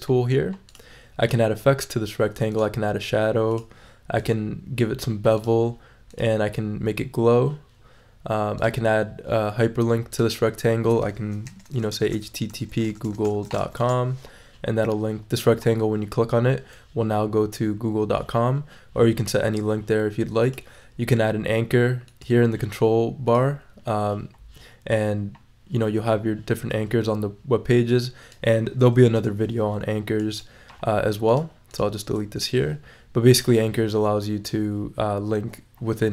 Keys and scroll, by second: 11.2-14.1 typing, 29.1 BackSpace, 32.3 BackSpace.